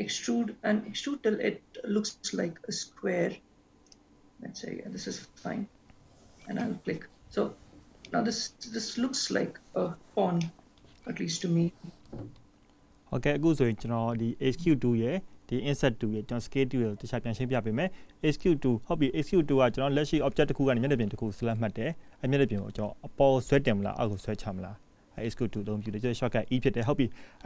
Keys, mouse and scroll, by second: 5.2-6.0 scroll down 2, 6.3-8.2 scroll down 2, 8.2 middle click, 10.7 middle click, 11.9 click.